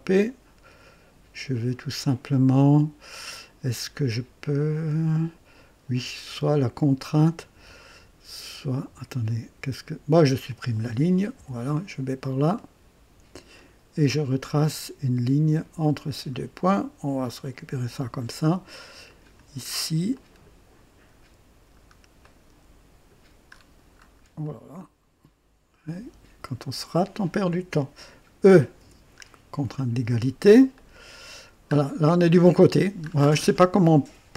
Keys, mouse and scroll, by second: 10.5 click, 11.4 Delete, 11.4 Delete, 12.5-13.6 drag, 14.6 click, 16.1 click, 17.4 click, 18.2 right click, 19.1 click, 19.6-19.9 scroll down 1, 20.1 right click, 21.1-22.1 scroll down 2, 22.2-23.3 right drag, 23.5-24.2 scroll up 2, 24.4 right click, 26.7 click, 28.8 e, 29.2-29.6 scroll down 1, 29.8-30.5 right drag, 30.7-31.5 right drag, 31.7 scroll up 1, 33.0 scroll down 1.